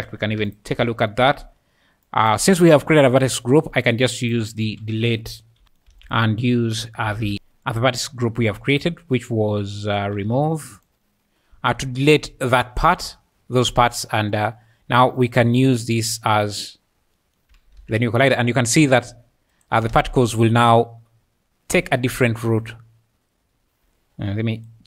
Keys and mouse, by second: 0.5 ctrl+shift+click, 3.1 shift+a, 5.9 shift+a, 8.0 click, 8.5 click, 8.8-10.9 drag, 11.5 `, 12.0 `, 12.1 `, 15.4 click, 17.1 click, 17.8 alt+a, 18.0 `, 19.6 shift+click, 19.9 space, 22.8-23.8 `.